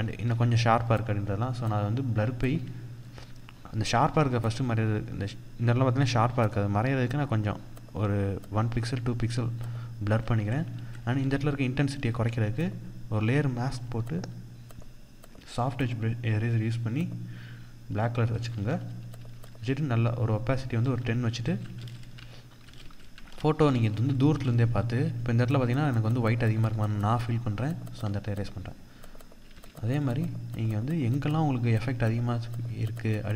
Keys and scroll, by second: 10.1 ctrl+-, 10.5 ctrl+0, 18.0 ctrl+=, 22.9 ctrl+-, 23.2 ctrl+0.